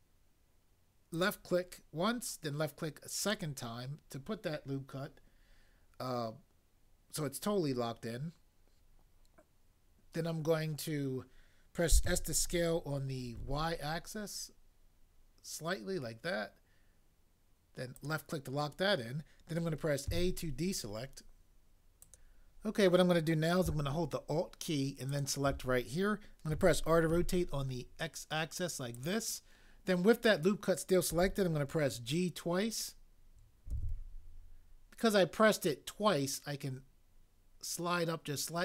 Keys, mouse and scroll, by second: 12.0 s, 13.5 y, 20.1 a, 26.5 r, 27.1 x, 33.7 g, 33.9 g.